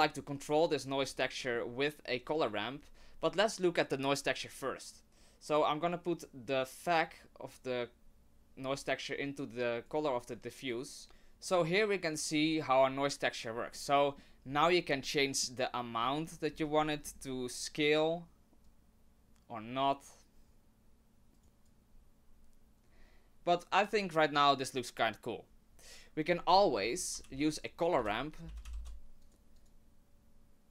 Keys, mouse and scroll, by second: 1.0-1.4 scroll down 4, 1.4 middle click, 6.8 click, 18.7 click, 26.6 middle click, 27.2 shift+a.